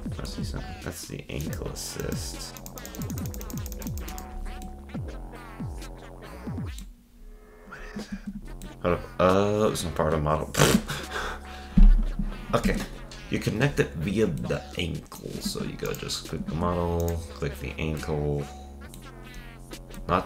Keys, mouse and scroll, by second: 0.7 click, 1.4 click, 2.0 click, 4.2-4.7 scroll down 8, 4.7-7.2 middle drag, 7.2-7.9 scroll up 3, 8.7 middle click, 8.8 scroll down 3, 11.9 scroll down 1, 12.7 ctrl+Tab, 13.7 scroll down 1, 14.4-15.5 middle drag, 15.5 ctrl+Tab, 15.9 click, 16.5 ctrl+Tab, 17.0-18.4 drag, 18.4-20.2 middle drag.